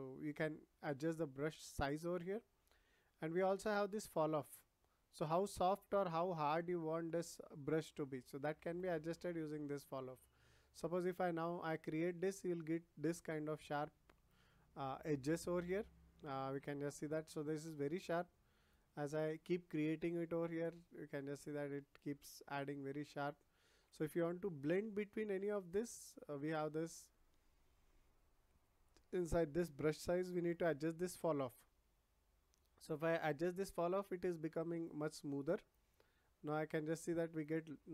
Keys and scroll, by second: 24.1 ctrl+z.